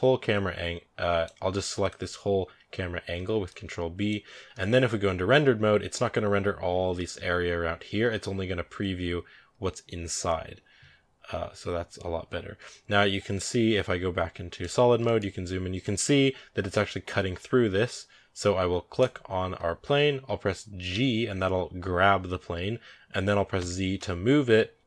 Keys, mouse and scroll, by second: 1.7-3.9 drag, 3.9 ctrl+b, 5.2 z, 14.5 click, 14.9-15.2 shift+middle drag, 15.2 scroll up 6, 15.7 shift+middle click, 16.1-17.1 scroll up 1, 18.0 scroll down 3, 18.8 right click, 19.4 scroll up 2, 19.5 scroll down 2, 20.7 g.